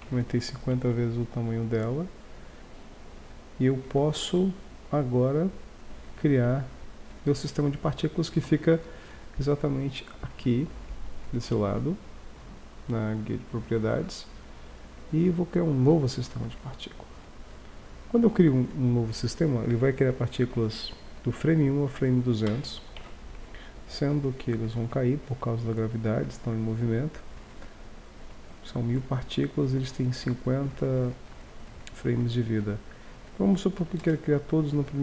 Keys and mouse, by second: 0.0 Tab, 1.2 shift+2, 2.0 shift+2, 2.6 Tab, 3.1 Tab, 7.3-10.2 middle drag, 10.2-12.1 drag, 12.1-15.8 middle drag, 15.8-16.9 drag, 23.0 alt+a, 26.3 Escape, 33.0-34.7 drag.